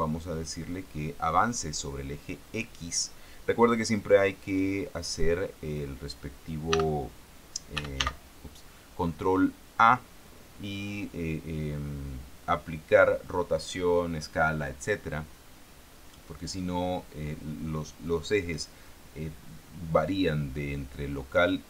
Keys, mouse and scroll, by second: 7.0 t, 8.1 t, 8.3 n.